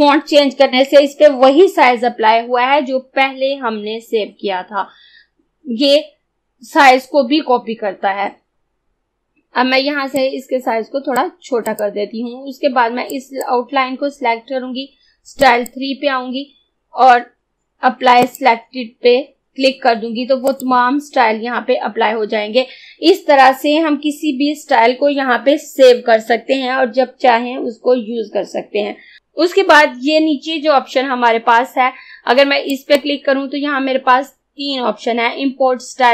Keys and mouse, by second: 10.2-15.4 drag, 18.3 click, 32.8 click.